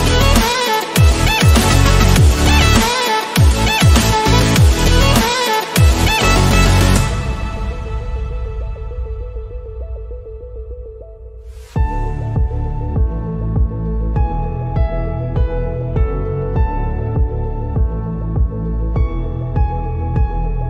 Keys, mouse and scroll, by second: 7.6-8.2 scroll down 1, 8.5-8.9 scroll down 1, 9.7-10.2 scroll up 2, 11.4 scroll down 1, 12.8-17.2 drag, 17.2 scroll down 1, 19.5 scroll up 1, 19.9-20.6 drag.